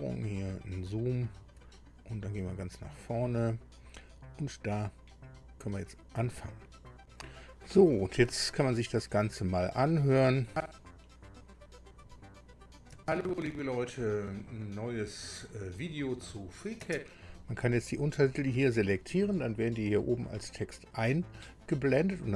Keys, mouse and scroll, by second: 0.9-1.3 ctrl+scroll up 2, 2.4 click, 6.3 click, 10.2 click, 16.8 space, 18.4 click.